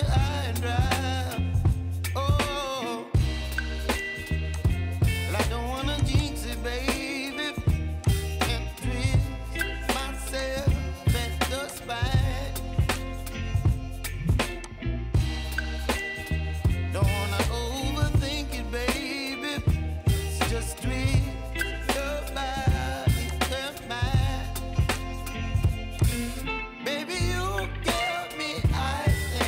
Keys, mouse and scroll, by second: 1.4 l, 14.5 click, 15.3-21.7 middle drag, 23.2 click, 24.3-24.7 scroll up 2, 24.7 scroll down 3, 25.3-26.0 middle drag, 26.0 click, 27.0 Tab, 27.7-28.1 scroll down 2, 28.2 middle click, 29.1 Tab.